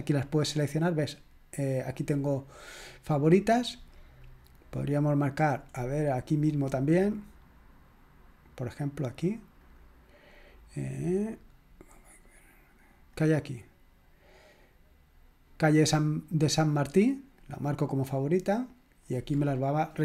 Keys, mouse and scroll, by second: 1.9 click, 4.2 click, 5.9-6.7 scroll up 2, 6.7-7.1 scroll up 1, 9.0 click, 9.6 click, 13.1 click, 17.3 click, 19.0 click.